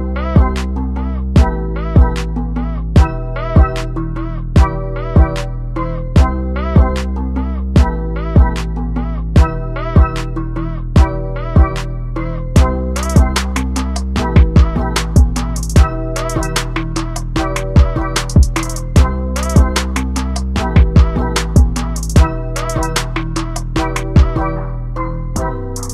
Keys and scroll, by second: 24.4-25.0 typing, 24.5 Caps_Lock.